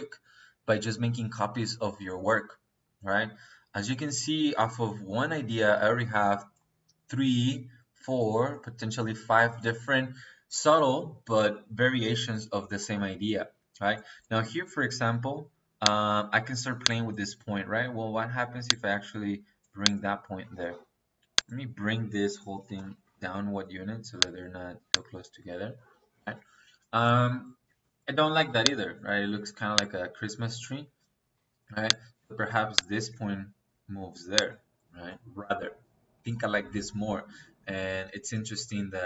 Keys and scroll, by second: 22.6-23.1 typing, 25.0 Escape, 30.7 Escape.